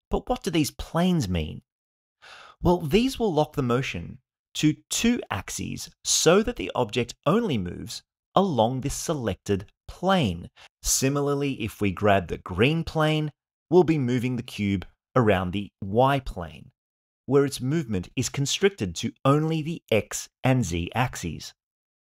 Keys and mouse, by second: 2.9-11.6 drag, 11.7 click, 11.9-22.0 drag.